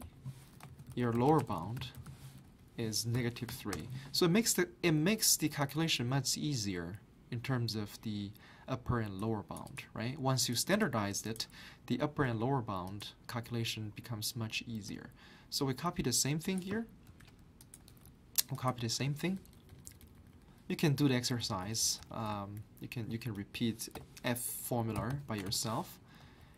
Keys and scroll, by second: 0.0-1.9 typing, 3.7 Return, 3.7 typing, 9.1-9.8 typing, 17.1 ctrl+c, 18.0 ctrl+v, 19.4 Right, 19.5 Right, 19.7 Right, 19.8 Right, 20.0 Right, 20.2 Right, 20.3 Right, 20.7 Left, 22.3 Left, 24.0-25.9 typing, 26.2 Left.